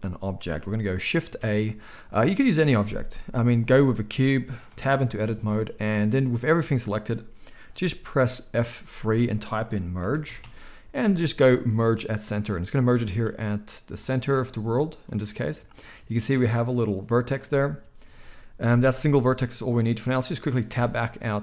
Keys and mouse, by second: 1.2 shift+a, 4.7 Tab, 8.7 F3, 13.9-21.4 shift+middle drag, 18.1 KP_1, 20.7 Tab.